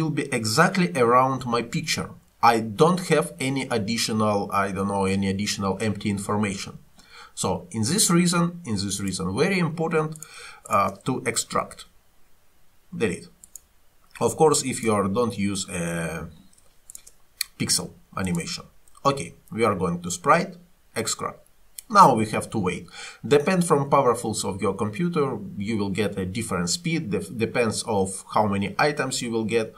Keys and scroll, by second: 11.6 Delete.